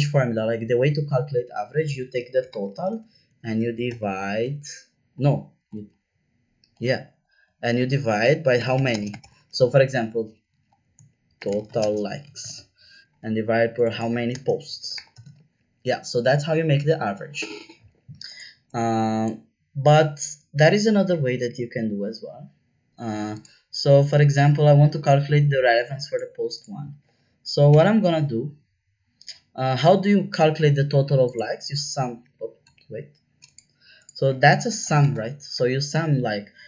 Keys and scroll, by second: 1.9-4.7 typing, 5.7 Up, 6.9 Down, 7.1 Down, 8.3-9.7 typing, 10.1 Up, 10.4 Up, 11.1-12.9 typing, 14.4-15.6 typing, 27.7 =, 32.6 BackSpace, 34.7 shift+s, 35.0 m, 35.1 Return.